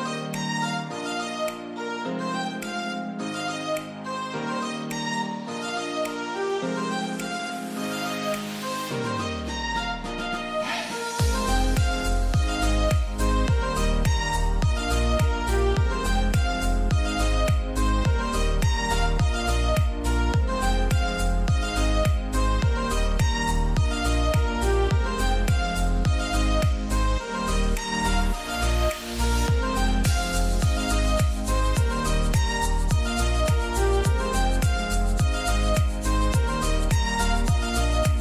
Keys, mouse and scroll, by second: 11.1-15.2 drag, 11.1 typing, 15.2-18.6 drag, 15.2 typing, 18.6-21.1 drag, 21.6 right click, 22.4 click, 23.5 click, 24.6-25.6 scroll down 1, 25.6-37.2 drag, 37.9-38.2 drag.